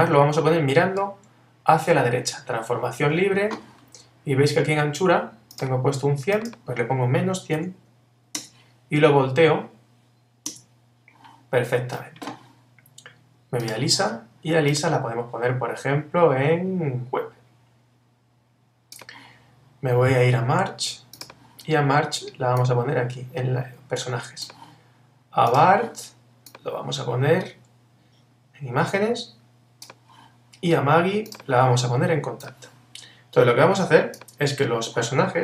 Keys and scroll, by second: 3.0 super+t, 8.4 Return.